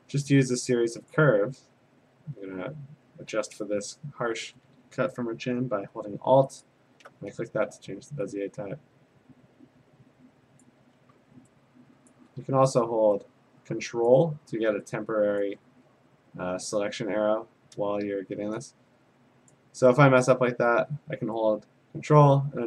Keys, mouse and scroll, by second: 1.1 click, 6.6 alt+click, 10.6 click, 12.1 ctrl+click, 14.1 click, 17.4 ctrl+click, 19.5 click.